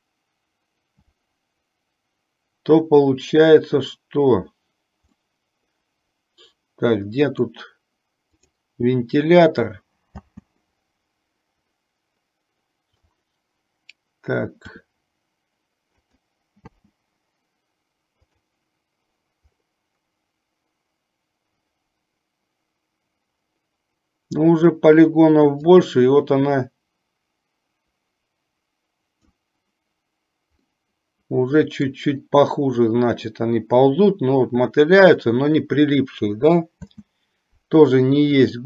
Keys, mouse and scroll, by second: 5.8-8.0 middle drag, 10.3 space, 10.9-13.4 middle drag, 14.8 r, 16.9 space, 18.6 click, 26.4-30.4 drag, 31.1-32.9 middle drag, 37.3 space.